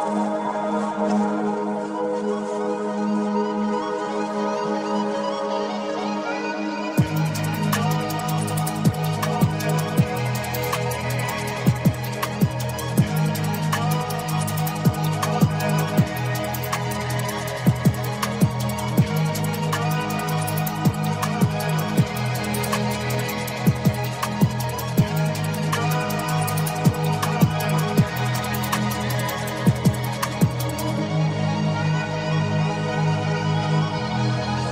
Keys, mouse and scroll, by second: 0.8 click, 0.8 s, 0.9 s, 1.7-3.8 drag, 1.7 s, 5.3 click, 7.6-11.6 drag, 12.2-13.3 drag, 16.1 click, 17.2-18.6 drag, 23.0 click, 25.5 drag, 32.7 click.